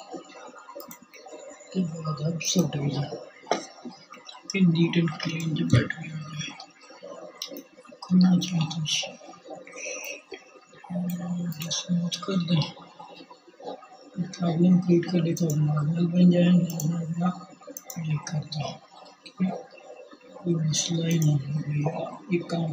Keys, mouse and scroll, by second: 14.0-15.2 drag, 16.6-19.6 drag, 19.8-22.7 drag.